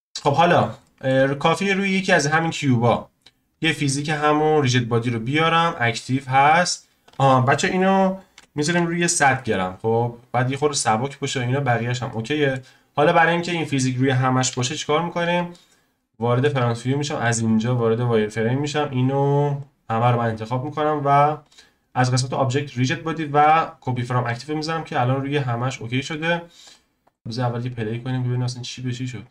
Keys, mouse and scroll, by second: 0.1 click, 0.4-0.8 scroll up 1, 0.8-1.6 shift+middle drag, 1.6 click, 3.6 click, 4.5-9.9 drag, 11.6 scroll down 1, 12.1-14.5 middle drag, 14.5 KP_1, 14.9-15.5 scroll up 1, 15.5-17.3 shift+middle drag, 17.3 z, 18.2 click, 18.5 click, 21.4-24.4 drag, 25.3-25.7 scroll down 1, 26.1 z, 27.0 click, 27.2 shift+middle click, 27.9-29.3 drag.